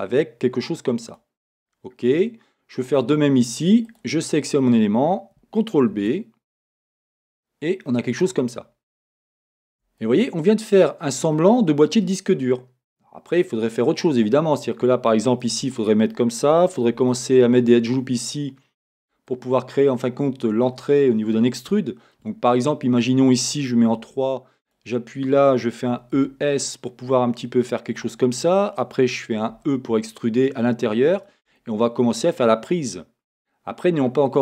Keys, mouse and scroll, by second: 1.1 click, 1.7-3.9 middle drag, 3.9 click, 5.9 ctrl+b, 8.1 click, 8.6-9.7 middle drag, 9.7 Tab, 14.0-19.4 middle drag, 14.4-15.3 scroll down 2, 15.3 scroll down 1, 16.9 r, 19.3 ctrl+r, 19.4 click, 19.9-24.6 middle drag, 22.4-22.9 scroll down 2, 24.0 3, 24.6 click, 25.9 e, 28.0 click, 29.5 click, 31.4-34.2 drag, 34.2-34.4 middle drag.